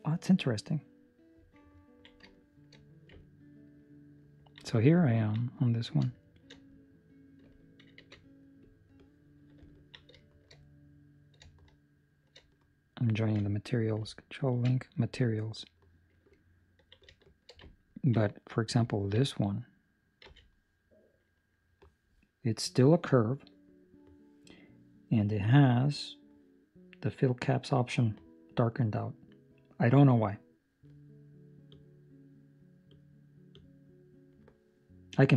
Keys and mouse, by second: 1.7 ctrl+middle click, 2.3 shift+middle click, 3.2 ctrl+middle click, 5.0 ctrl+middle click, 6.2 shift+right click, 7.9 ctrl+l, 9.6 ctrl+middle click, 10.3 shift+middle click, 11.0 right click, 12.0 shift+right click, 16.3 ctrl+l, 16.3 ctrl+middle click, 17.1 shift+middle click, 17.6 ctrl+middle click, 18.4 right click, 18.8 ctrl+middle click, 20.2 z, 24.7 middle click, 28.5 middle click, 31.7-35.3 click.